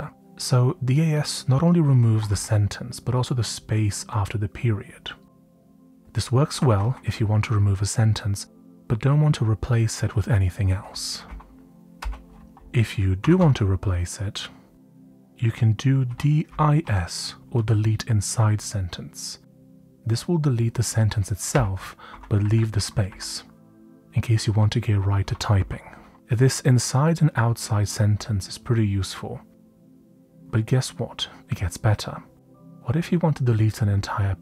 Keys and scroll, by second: 0.0 typing, 1.6-2.8 typing, 6.2-7.3 typing, 11.2-13.8 typing, 15.8-18.9 typing, 21.2-22.0 typing, 23.0-23.8 typing, 24.9-26.6 typing, 29.9-31.2 typing.